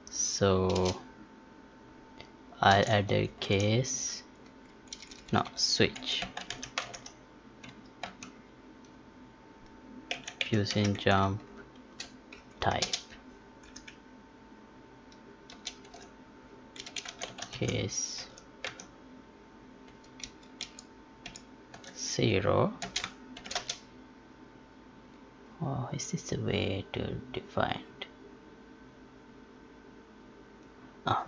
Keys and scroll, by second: 22.7 space.